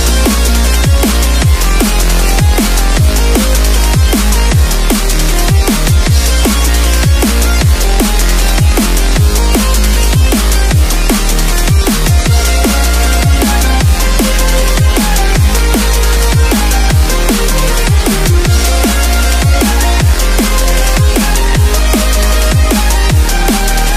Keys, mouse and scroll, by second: 0.2 click, 6.1 click, 8.7 ctrl+s, 10.9 click, 14.7 b, 15.4 click, 18.5 ctrl+z, 20.0 click, 23.2 ctrl+s.